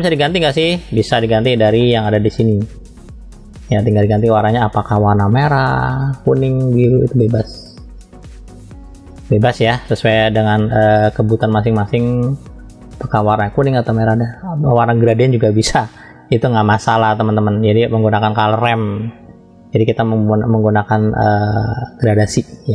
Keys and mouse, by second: 0.5-1.5 drag, 1.9 middle click, 10.5-13.4 drag.